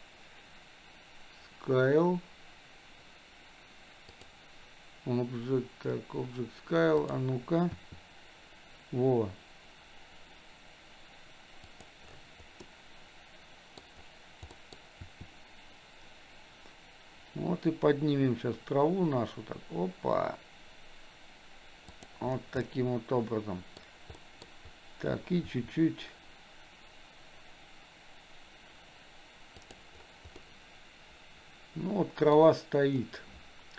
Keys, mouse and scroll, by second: 4.2 click, 7.1 click, 7.8 r, 12.7-13.9 middle drag, 14.5 middle click, 15.1 r, 22.7-23.9 middle drag, 24.2 middle click, 25.5 r, 30.5-32.4 middle drag.